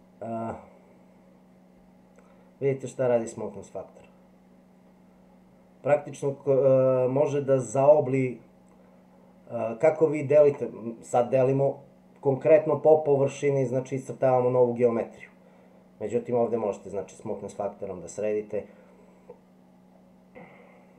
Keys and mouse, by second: 16.0-20.9 drag.